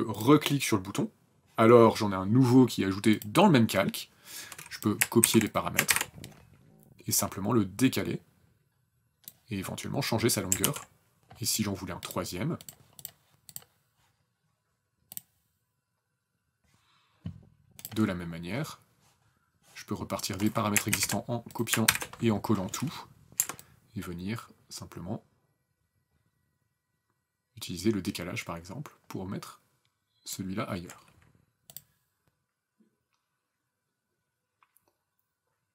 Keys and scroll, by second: 4.5 ctrl+c, 5.2 ctrl+v, 10.0 ctrl+z, 20.6 ctrl+c, 21.7 ctrl+v.